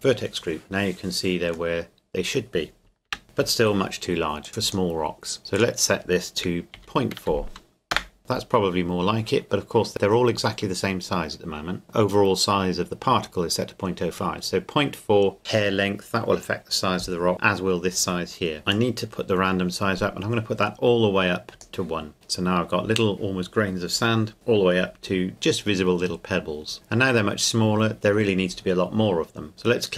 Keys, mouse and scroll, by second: 0.9-1.7 scroll down 2, 1.7-3.1 middle drag, 3.1 KP_0, 4.4 click, 6.7 KP_Decimal, 7.2 KP_4, 7.9 KP_Enter, 18.7 click, 25.3 scroll up 1.